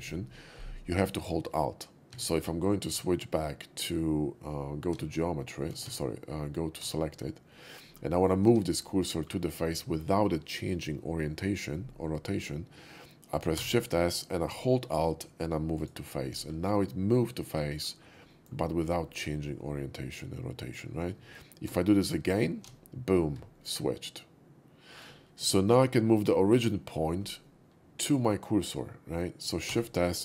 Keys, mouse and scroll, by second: 2.2 Tab, 3.6 shift+s, 7.5 middle drag, 7.5 shift+s, 8.0 middle click, 8.2 middle click, 8.5 Tab, 9.0 middle click, 13.6 shift+s, 15.8 alt+click, 16.7-17.8 alt+middle drag, 18.0 alt+middle click, 18.3 alt+middle click, 19.4-20.7 middle drag, 21.7 shift+s, 22.4 shift+s, 23.6-24.9 middle drag, 27.5 middle click.